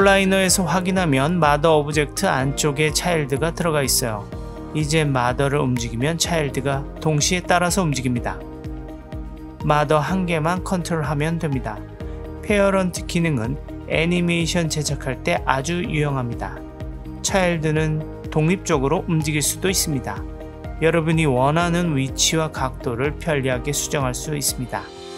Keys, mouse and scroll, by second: 0.2 click, 0.7 click, 1.9 click, 4.3-4.6 middle drag, 5.5 g, 8.0 middle click, 8.7 g, 9.8-10.9 middle drag, 11.0 middle drag, 11.7 click, 12.4-14.0 middle drag, 14.2-14.7 drag, 14.7 s, 15.8-17.6 middle drag, 18.0-20.2 drag, 21.2 click, 21.6 click, 22.6-24.2 middle drag, 24.8 Tab.